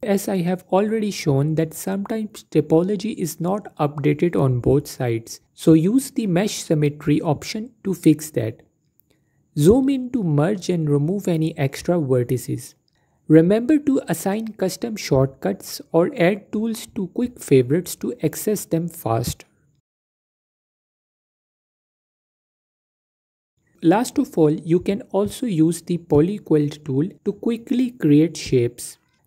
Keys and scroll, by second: 0.5 a, 3.3 typing, 8.7 q, 21.0 typing.